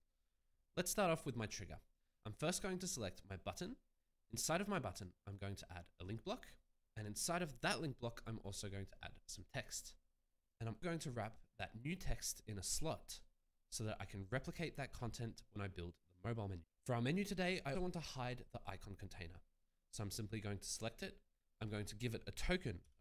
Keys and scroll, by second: 10.4 BackSpace, 21.4 ctrl+z, 22.5-23.0 typing.